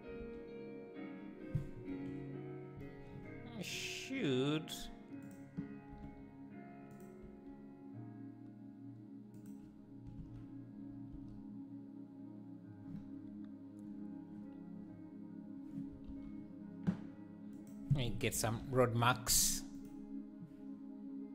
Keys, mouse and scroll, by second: 5.3 click, 5.9 r, 7.2 g, 10.2 alt+a, 18.9-21.3 drag.